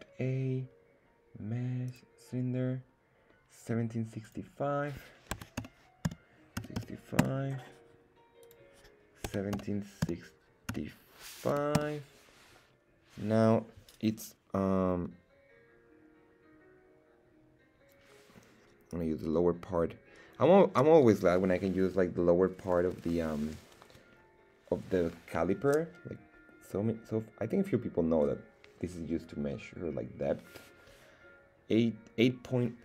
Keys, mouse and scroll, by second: 4.2-7.8 drag, 8.4-12.5 drag.